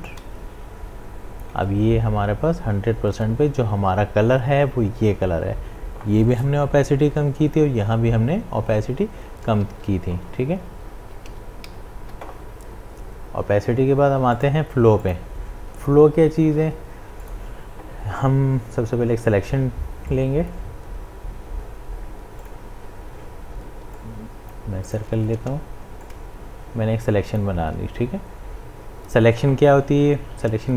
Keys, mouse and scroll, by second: 9.6 click, 9.7 ctrl+z, 14.3 click, 20.1-30.6 drag.